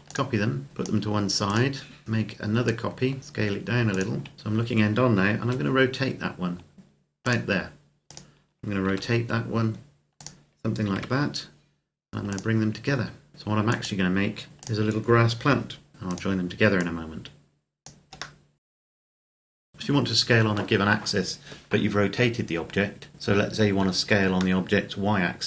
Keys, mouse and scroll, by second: 1.2 right click, 2.0 click, 3.2 s, 3.7 click, 4.3 KP_3, 5.3 r, 7.0 click, 7.9 right click, 8.7 r, 9.9 click, 10.7 g, 12.1 click, 13.3 g, 13.5 click, 14.5 click, 15.8 KP_7, 15.9 right click, 16.6 click, 18.2 middle click, 18.5 scroll up 1, 18.7 click, 18.9 alt+right click, 19.1 s, 19.4 Escape, 19.6 click, 19.7 middle click, 24.5 middle click.